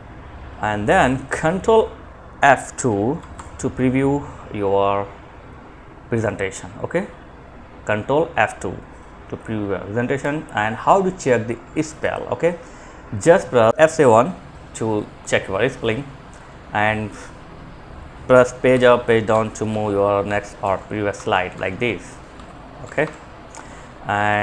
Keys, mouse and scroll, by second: 2.4 F2, 9.4 Escape, 11.2 click, 17.9 Page_Down, 18.5 Page_Down, 18.9 Page_Down, 19.4 Page_Down, 19.9 Page_Up, 23.5 click.